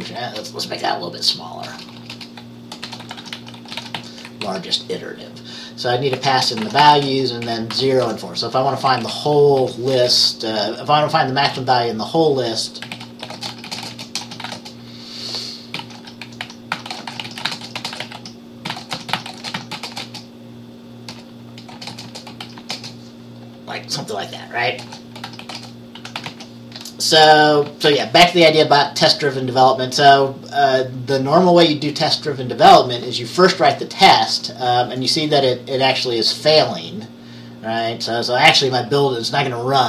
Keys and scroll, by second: 0.2 Left, 0.5 BackSpace, 1.0 BackSpace, 2.7-4.6 typing, 6.0-11.4 typing, 12.8-23.0 typing, 24.9-28.5 typing.